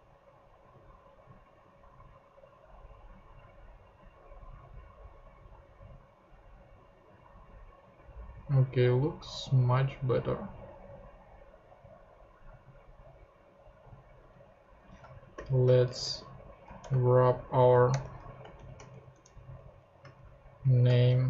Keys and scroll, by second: 14.6 Return, 15.1-16.8 typing, 17.9 Return, 18.4 shift+Return, 18.6 shift+., 19.1 shift+Return, 19.5 Down, 20.1 alt+shift+Down, 20.1 alt+shift+Up, 21.0 alt+shift+super+Up, 21.1 alt+shift+super+Left.